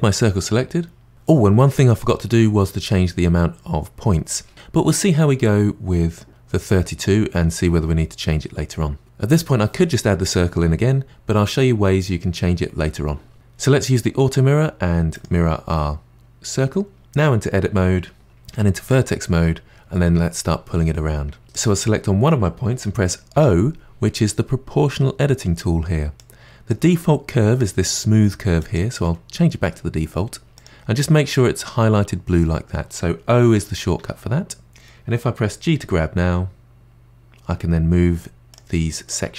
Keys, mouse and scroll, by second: 15.1 click, 17.0 Tab, 18.5 1, 20.9-21.4 scroll down 1, 21.5 click, 23.3 o, 26.2-29.2 drag, 33.5 o, 34.0 o, 34.7 click, 35.8 g, 39.1 click, 39.2 g.